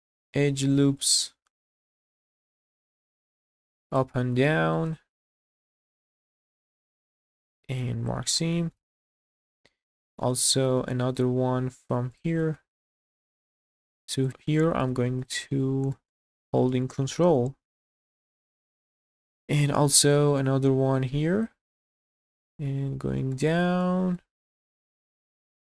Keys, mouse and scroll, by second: 1.0 alt+shift+click, 1.6 scroll down 2, 1.9 shift+middle click, 2.2 middle click, 3.0 shift+middle click, 3.4 scroll up 1, 3.9 alt+shift+click, 4.5 shift+middle click, 5.0 scroll up 2, 5.4 shift+middle click, 6.5 alt+shift+click, 7.2 q, 8.2 scroll down 2, 8.5 shift+middle click, 9.0 scroll down 1, 9.3 shift+middle click, 9.7 middle click, 10.4 shift+middle click, 10.9 middle click, 11.4-12.1 scroll up 2, 12.1 click, 12.5 shift+middle click, 12.9 middle click, 13.5 shift+middle click, 14.2 ctrl+click, 14.8 q, 15.6 scroll down 2, 15.9 shift+middle click, 16.3 middle click, 16.8 shift+middle click, 17.4 shift+middle click, 18.3 scroll up 2, 18.6 shift+middle click, 19.1 scroll up 2, 19.4 shift+middle click, 19.9 scroll up 2, 20.2 shift+middle click, 21.3 click, 22.5 scroll down 1, 22.7 middle click, 22.7 middle click, 23.4 shift+middle click, 23.8 shift+middle click, 24.6 shift+middle click.